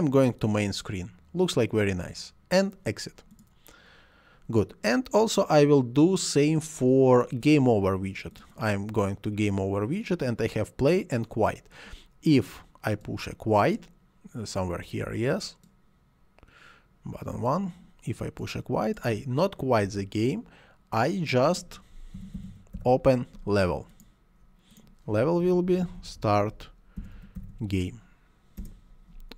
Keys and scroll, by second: 19.9 Delete, 21.9-23.2 typing, 25.2-27.9 typing, 28.6 Return.